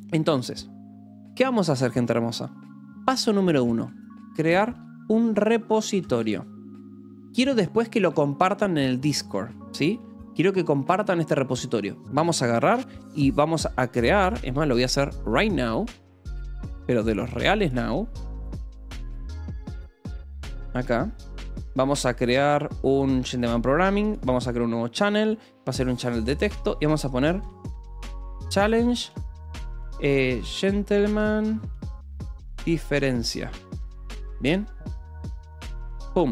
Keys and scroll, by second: 3.9-6.7 typing, 7.2 Escape, 8.0 o, 8.5 2, 9.5 :, 9.8 space, 27.5-33.9 typing, 35.7 Return.